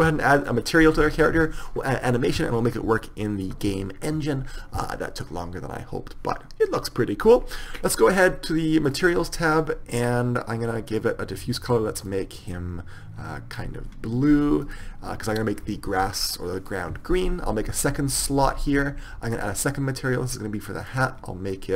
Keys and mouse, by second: 1.5 right click, 1.6 click, 2.7-4.8 middle drag, 5.2-7.0 middle drag, 9.1-10.9 drag, 11.1-12.8 drag, 14.8-16.8 drag, 19.5-21.7 drag.